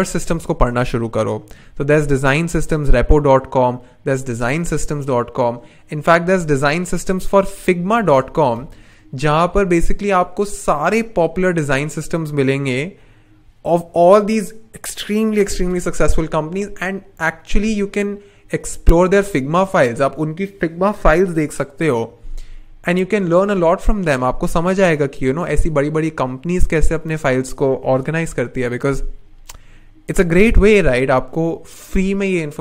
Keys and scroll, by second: 7.1 super+c, 7.6 super+t, 7.9 super+v, 8.6 Return.